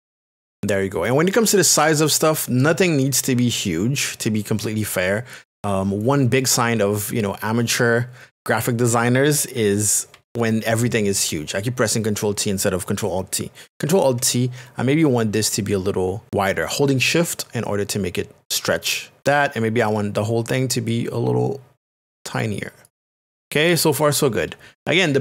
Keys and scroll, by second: 11.9 t, 15.0 alt+t.